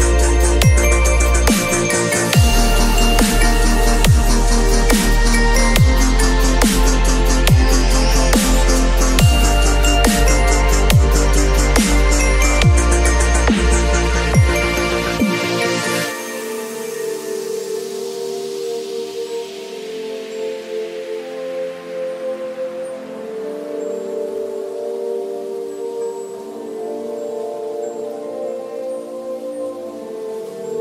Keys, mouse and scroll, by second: 9.7 ctrl+d, 17.2-18.4 shift+drag.